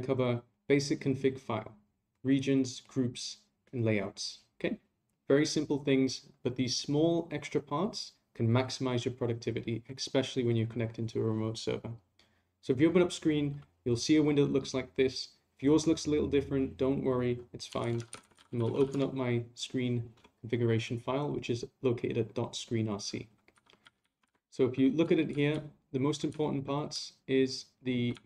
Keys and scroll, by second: 24.2 ctrl+c.